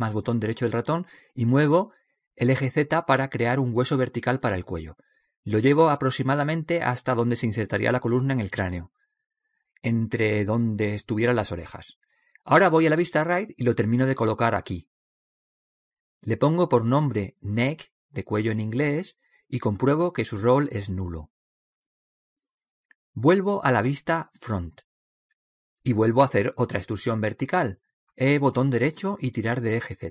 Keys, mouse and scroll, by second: 1.8 e, 3.8 click, 9.9 right click, 11.8 right click, 12.8-14.6 drag, 14.8 KP_3, 16.9-18.5 drag, 18.5 middle click, 18.8 right click, 20.0-21.1 middle drag, 21.1-23.3 drag, 25.9 KP_1, 27.7 e, 29.8-30.1 drag.